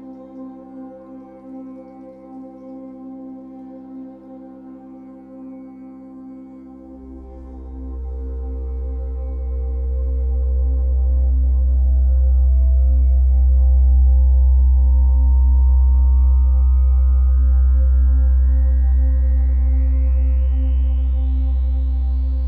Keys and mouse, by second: 0.0 click, 1.8 g, 2.1 z, 4.3 click, 6.5-12.9 alt+drag, 12.9 typing, 14.6 click, 15.5 typing, 16.9 alt+shift+click, 20.0 click, 20.9-21.5 alt+drag, 21.8-22.4 ctrl+alt+drag.